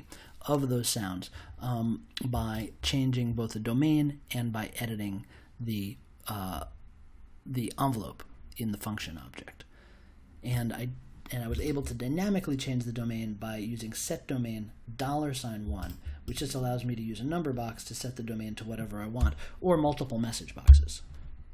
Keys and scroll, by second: 19.1 BackSpace, 20.6 m.